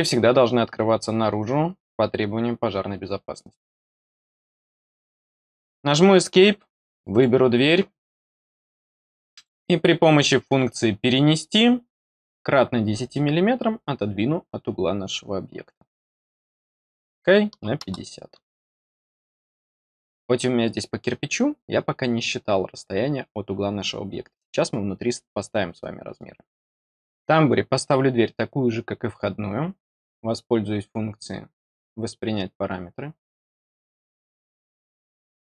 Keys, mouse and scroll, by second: 3.3 click, 7.0 click, 9.3 click, 33.1 click.